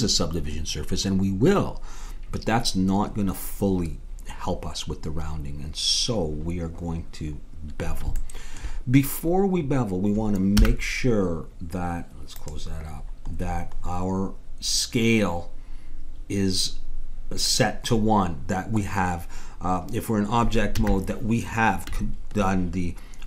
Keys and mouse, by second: 5.4 middle click, 8.2-9.5 middle drag, 10.5 n, 12.3-14.2 drag, 20.7 n.